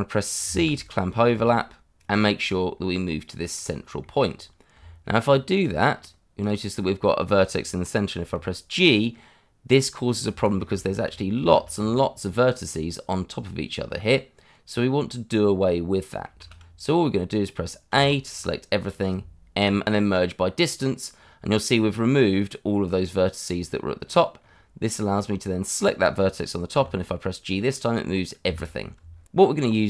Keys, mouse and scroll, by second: 0.5 c, 2.0 click, 2.2 shift+middle click, 2.2 middle click, 2.3 shift+middle click, 2.5-2.8 shift+scroll up 2, 3.0 middle click, 3.6 scroll up 1, 4.0 shift+middle click, 4.2 shift+scroll up 2, 4.7 Tab, 5.9 scroll up 1, 6.4 click, 8.2 g, 10.3 Escape, 10.8 shift+middle click, 11.1 middle click, 11.1 scroll up 1, 11.5 shift+z, 11.9 middle click, 16.4 shift+z, 17.1 scroll down 1, 17.9 a, 18.2 scroll down 1, 19.5 m, 20.6 click, 24.0 scroll up 1, 25.1 click, 26.7 g, 28.4 Escape, 28.8 scroll down 1, 29.6 middle click.